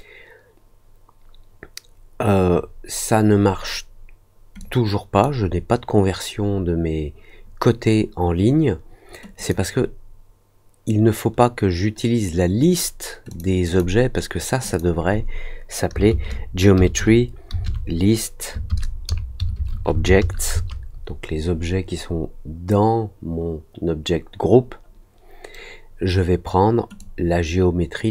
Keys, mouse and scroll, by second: 4.5 click, 9.3 click, 13.2 click, 13.6 click, 14.6 click, 26.9-28.1 drag.